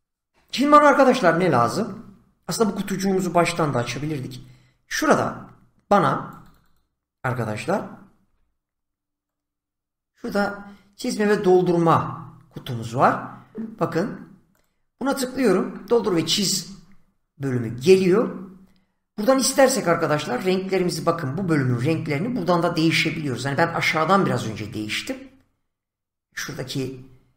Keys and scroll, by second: 3.8 <, 8.2 <.